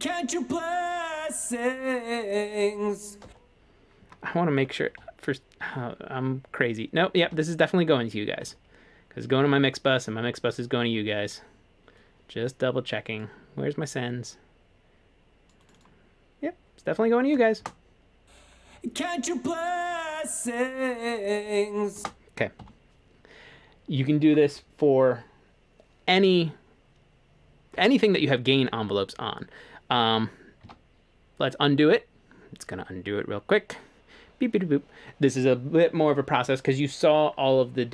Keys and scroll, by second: 3.2 space, 5.0 F3, 7.2 F3, 8.5 F3, 17.6 space, 22.0 space, 22.6 F3, 30.7 super+z.